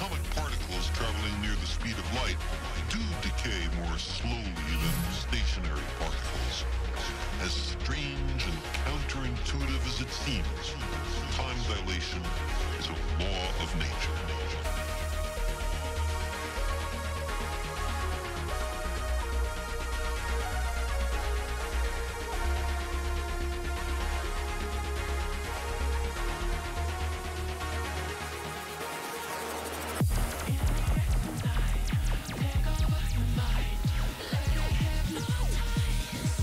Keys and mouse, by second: 0.4 click, 1.2 click, 1.9 click, 4.0 space, 4.1 click, 5.8 click, 6.5 click, 7.1 click, 14.7 click, 22.9 click, 25.7 click, 26.0 click, 26.5 click, 27.7 click.